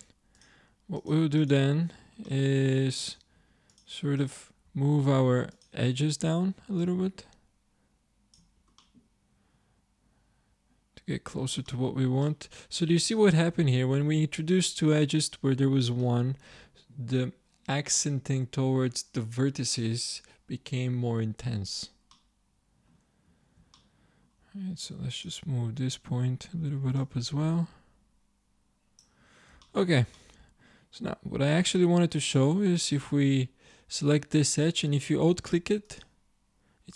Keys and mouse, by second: 2.3 click, 2.4 middle click, 2.8 middle click, 3.2 ctrl+Tab, 4.7 z, 8.4 z, 9.0 middle click, 9.6 middle click, 13.7-15.5 drag, 21.6 click, 25.7-28.8 drag, 35.9-36.9 drag.